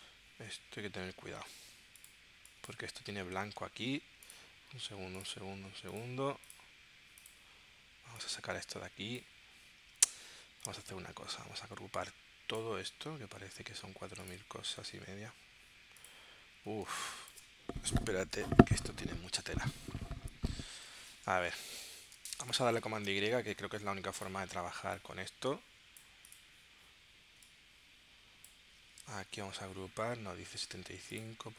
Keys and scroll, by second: 3.7 super+z, 16.9 space, 22.3 space, 23.0 super+y, 29.2 super+g.